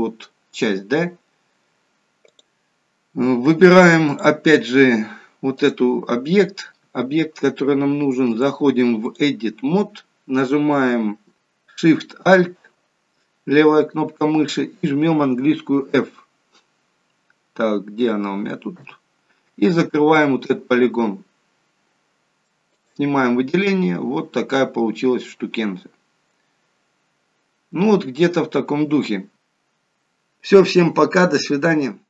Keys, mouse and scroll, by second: 2.3 click, 4.2 click, 8.4 click, 11.3 alt+shift+click, 18.9 f, 20.3 middle click, 22.8 click, 23.3 middle click, 28.0-29.1 scroll down 3, 29.1 scroll up 1, 29.3 middle click, 29.3 scroll down 1.